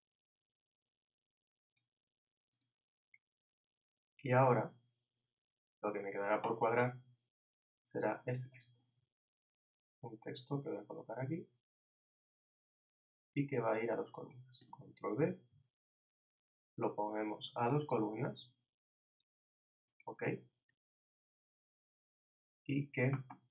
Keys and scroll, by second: 15.5 super+b.